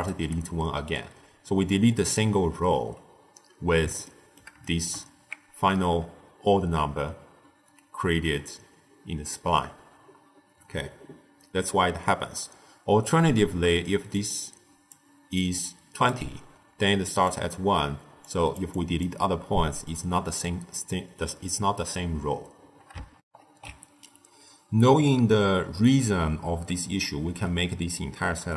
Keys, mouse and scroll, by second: 0.0-2.3 typing, 1.6-2.1 drag, 4.0-7.6 ctrl+middle drag, 13.8 d, 14.1-14.8 drag, 14.8-19.3 typing, 15.3-16.0 drag, 17.2 click, 18.1 click, 18.6 drag, 21.0 d, 23.1 ctrl+alt+shift+w.